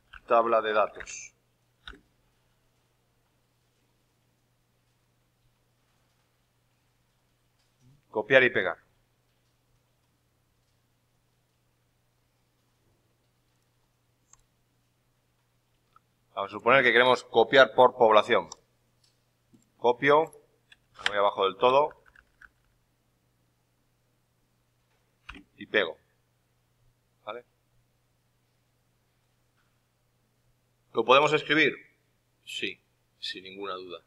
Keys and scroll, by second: 20.9 ctrl+Down, 22.1 Left, 22.1 Down, 22.2 Left, 22.3 Down.